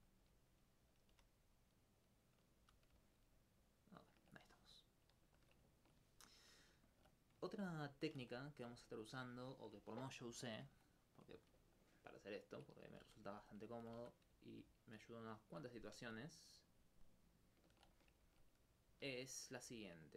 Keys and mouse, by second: 0.6 alt+s, 0.9 click, 1.1 g, 1.9 click, 2.6 a, 3.0 alt+click, 3.7 alt+click, 4.7 alt+click, 7.8 alt+click, 8.2 alt+click, 8.8 ctrl+alt+click, 10.5 alt+click, 10.7 alt+click, 11.6 alt+click, 13.7 alt+click, 14.6 alt+click, 14.7 alt+click.